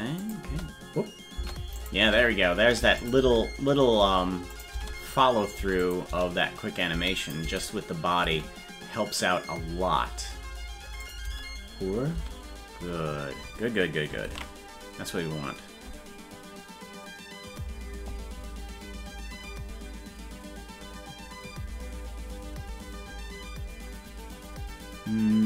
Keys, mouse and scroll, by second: 0.2 click, 0.5 space, 1.8 click, 2.0 space, 3.0 click, 3.2 space, 4.5 click, 4.7 space, 5.8 click, 6.1 space, 7.2 click, 7.2 space, 11.0 click, 11.2 space, 14.5 ctrl+s.